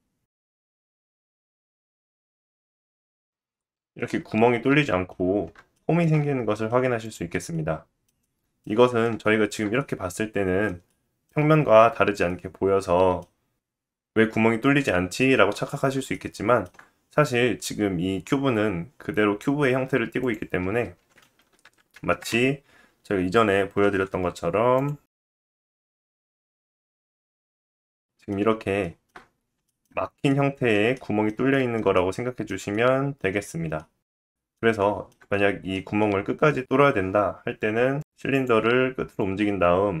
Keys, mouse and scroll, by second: 1.7-2.3 middle drag, 2.3 click, 2.5-3.0 middle drag, 3.0 click, 3.2-7.0 middle drag, 5.2-5.5 scroll up 2, 7.0 click, 7.1-14.7 middle drag, 11.5-12.3 scroll down 1, 15.4-15.8 scroll down 2, 16.1-16.7 shift+middle drag, 20.2 click, 21.0 r, 22.9 s, 23.8 g, 24.4 middle click, 24.4 click, 24.8-25.4 middle drag, 25.4 click, 25.8-27.8 middle drag, 26.1 scroll down 1, 26.6 g, 27.1 click, 27.8 click, 27.9-36.0 middle drag, 28.4-29.4 scroll up 4, 29.9-30.3 scroll up 2, 34.0 scroll down 3, 37.1 click, 37.6 g, 39.1 click, 39.5-40.0 middle drag.